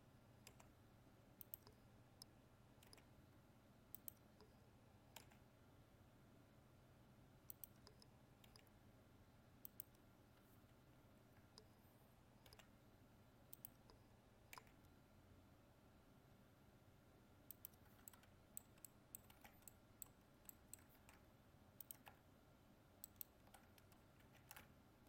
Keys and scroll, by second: 20.9 ctrl+Tab.